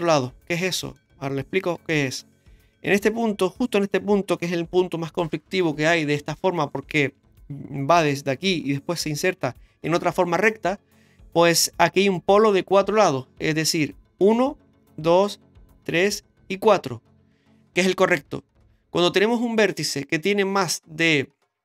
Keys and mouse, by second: 0.0 right click, 0.7 shift+middle click, 1.9 shift+middle click.